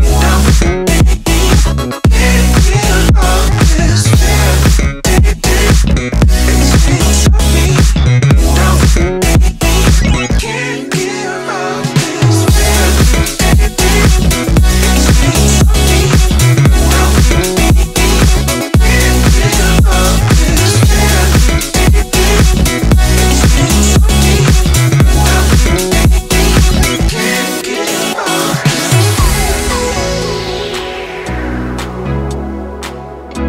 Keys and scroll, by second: 0.6 ], 1.1 ], 1.8 ], 9.8 [, 10.0 [, 10.2 [, 10.4 [, 12.2-12.8 typing, 17.0 [.